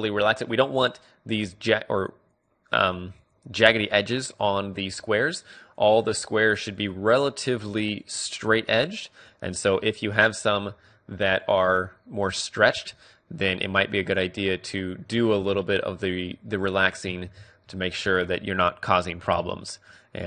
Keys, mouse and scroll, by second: 11.0-13.0 middle drag, 11.4 click, 13.0-14.9 drag, 14.9-15.9 middle drag, 15.6 Tab, 15.9 click, 16.2-18.6 middle drag, 18.2 Tab.